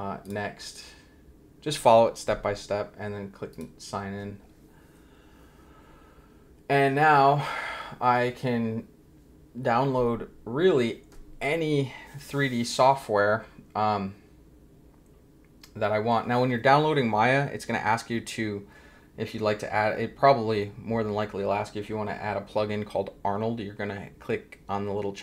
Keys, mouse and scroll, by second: 0.2 click, 3.5 click, 9.6-10.0 scroll down 1.